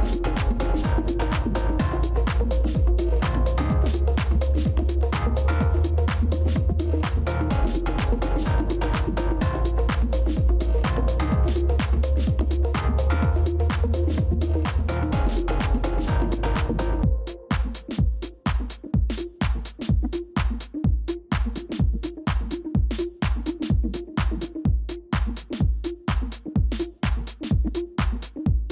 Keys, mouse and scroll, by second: 0.3 space, 0.9 space, 5.0 ctrl+-, 5.0-6.4 drag, 5.2 ctrl+-, 5.3 ctrl+-, 5.6 ctrl+-, 6.4 space, 11.0 click, 11.2 middle click, 13.7 space, 14.4 ctrl+-, 14.5 ctrl+-, 14.7 ctrl+-, 14.8 ctrl+-, 15.2 space.